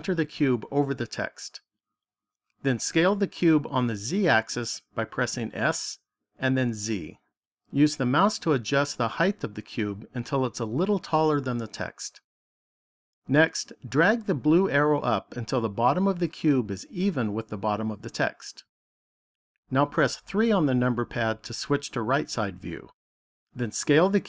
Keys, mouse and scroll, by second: 1.6 click, 5.3 s, 11.6 click, 15.6 click, 20.3 KP_3.